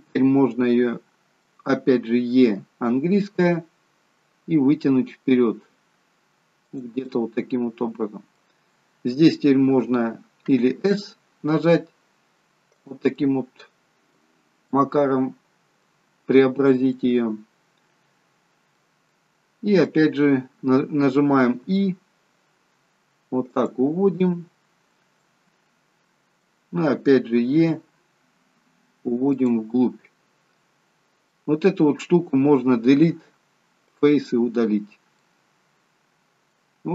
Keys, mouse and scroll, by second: 2.4 e, 7.0 middle click, 13.1 middle click, 14.3-14.9 scroll up 3, 14.6 middle click, 15.9-16.9 scroll down 4, 16.9 middle click, 19.0 middle click, 20.0-21.1 scroll up 2, 21.5-22.1 scroll up 1, 21.5 i, 25.2 middle click, 27.5 e, 29.7 middle click, 32.8 Delete, 34.7-35.1 scroll up 1, 35.6 middle click, 35.6 scroll up 1, 36.7-36.9 scroll up 4.